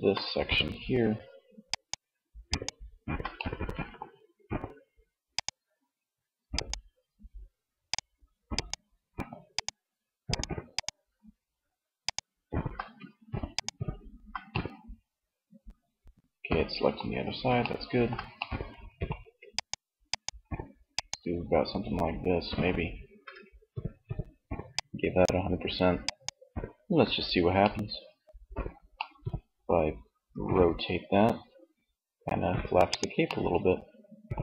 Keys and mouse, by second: 0.7 click, 1.1-2.5 right drag, 2.5 middle click, 18.7 click, 23.7-26.2 drag, 26.2 Tab, 27.6 middle click, 29.3 r, 32.2 click, 32.4-34.1 middle drag, 34.1 r.